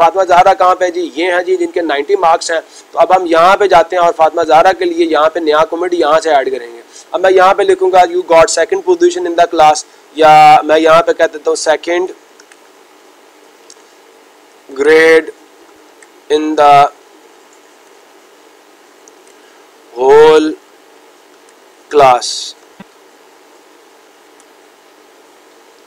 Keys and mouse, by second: 1.0-2.0 drag, 5.9-7.1 drag.